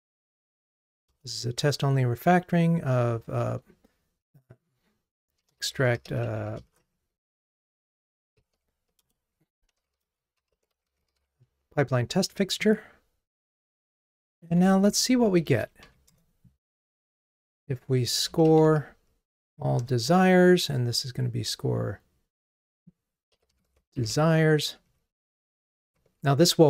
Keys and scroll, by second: 14.5 alt+Up, 15.5 super+d, 19.9 Return.